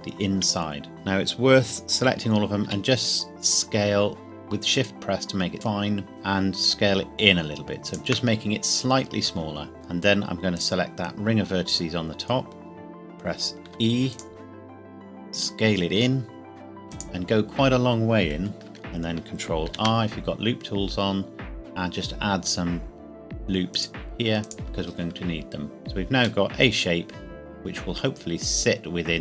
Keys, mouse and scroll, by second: 0.9 a, 2.6 s, 7.9 shift+click, 9.7-10.5 scroll up 1, 10.5 alt+click, 13.6 e, 14.1 click, 15.3 s, 16.9 click, 17.3-17.6 scroll up 1, 18.3 KP_Decimal, 18.5 scroll down 1, 19.7 ctrl+r, 20.9 scroll up 1, 22.9-23.2 scroll up 1, 23.7 click, 25.8 scroll down 1, 26.4 middle click.